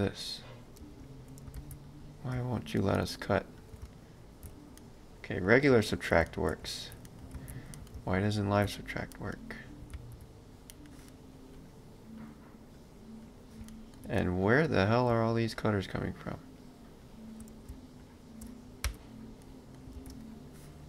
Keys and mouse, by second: 0.8 space, 1.6 ctrl+z, 1.9 click, 2.4 space, 3.9 ctrl+b, 4.8 middle click, 7.4 ctrl+z, 7.8 middle click, 8.0 ctrl+b, 9.1 middle click, 9.9 ctrl+z, 10.7 middle click, 11.6 click, 13.7 ctrl+middle click, 15.6 shift+click, 18.9 x, 19.4 middle click, 20.0 ctrl+space.